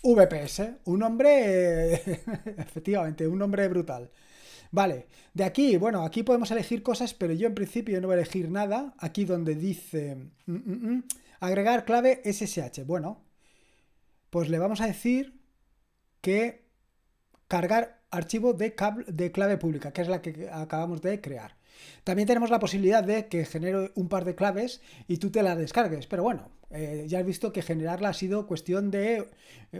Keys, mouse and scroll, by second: 0.0-0.9 typing, 11.1-13.0 scroll down 1, 13.0-17.6 scroll down 1, 17.6 click.